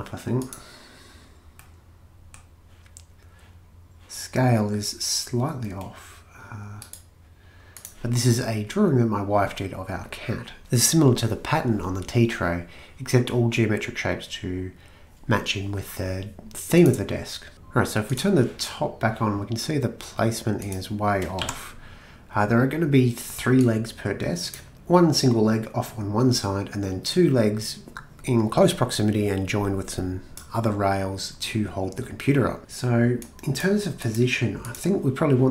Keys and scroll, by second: 21.4 m.